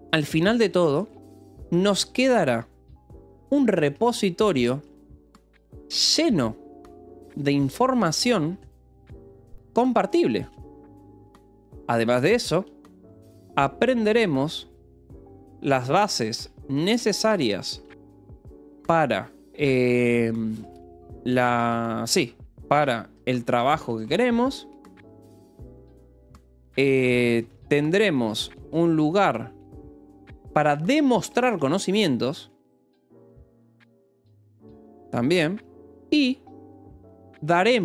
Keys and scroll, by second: 0.0-11.4 typing, 13.2-21.8 typing, 23.0-25.8 typing, 27.1-35.1 typing, 37.0-37.8 typing.